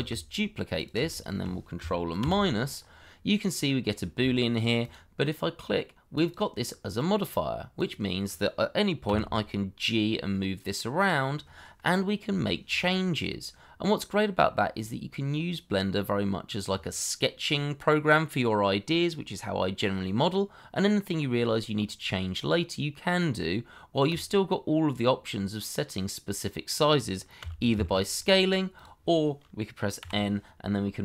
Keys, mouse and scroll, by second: 1.1 shift+click, 2.2 ctrl+KP_Subtract, 2.7-3.4 scroll up 1, 3.4 middle click, 4.2 shift+middle click, 9.0 g, 12.3 Escape, 13.3 middle click, 26.6 middle click, 27.4 s, 28.7 y, 30.0 n.